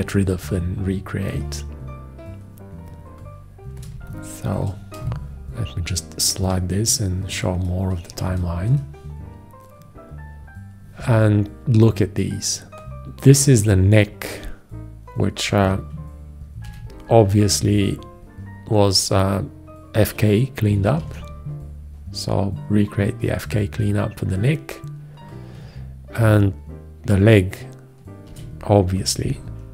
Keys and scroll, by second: 4.2 space, 16.9 shift+x, 21.3 alt+q, 28.5 shift+x.